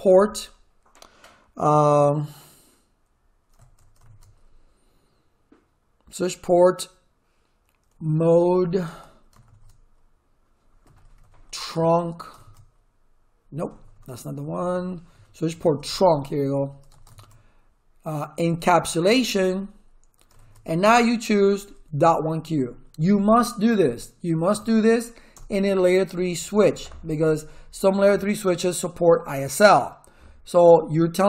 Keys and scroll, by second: 4.0 shift+/, 7.7-9.4 typing, 10.6-12.4 typing, 13.6 BackSpace, 15.6-19.2 typing, 19.4 Tab, 20.4 shift+/, 21.9-24.5 typing, 25.3 Return.